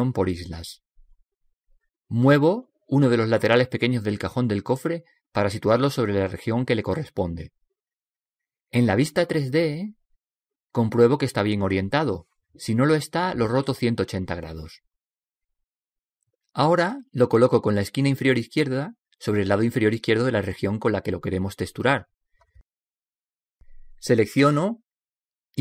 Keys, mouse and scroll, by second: 1.7 click, 4.7 right click, 6.1 g, 8.7-10.7 middle drag, 17.8 g.